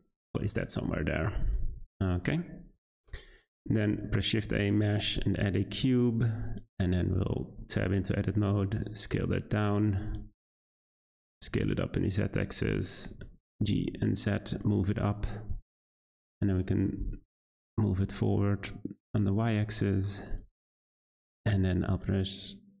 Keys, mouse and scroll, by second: 0.0-0.7 scroll down 8, 0.7-2.0 middle drag, 2.0-2.7 scroll up 3, 2.7 `, 3.4-3.9 scroll up 4, 3.9 shift+a, 7.3 Tab, 7.9 s, 9.2 z, 10.0-10.3 scroll up 2, 10.3 s, 11.2 s, 12.5 Tab, 13.1 g, 15.5 z, 16.2-16.6 middle drag, 16.6 scroll down 2, 16.9 g, 20.0-20.4 shift+middle drag, 20.4-22.8 scroll up 3.